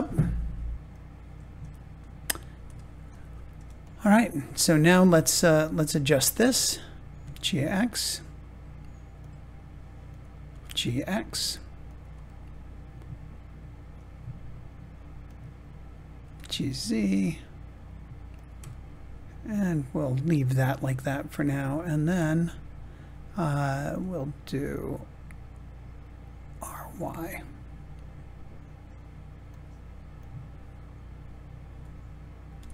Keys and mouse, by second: 0.8 click, 1.5 Tab, 3.0 click, 7.1 g, 7.3 x, 9.1 click, 10.4 g, 10.6 x, 11.8 click, 12.3-13.8 middle drag, 15.2 click, 16.1 g, 16.4 z, 18.3 click, 18.7-20.7 middle drag, 21.8 click, 22.2-23.9 middle drag, 26.4 r, 27.1 y, 29.4 click, 32.4 g, 32.6 x.